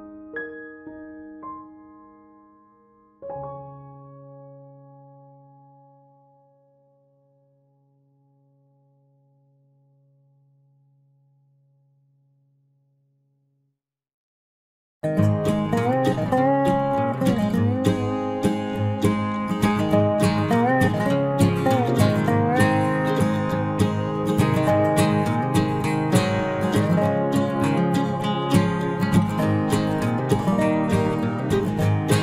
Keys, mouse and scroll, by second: 0.3 click, 5.8 ctrl+s, 6.7 middle click, 7.2 KP_Decimal, 7.5-9.3 middle drag, 10.4 Tab, 12.8-15.8 middle drag, 16.8 KP_Enter, 17.1 KP_0, 18.2 KP_Decimal, 21.0 b, 21.5 g, 22.5 g, 24.7 g, 25.6-28.1 right drag, 26.2 g, 28.6 click, 30.8-32.2 middle drag.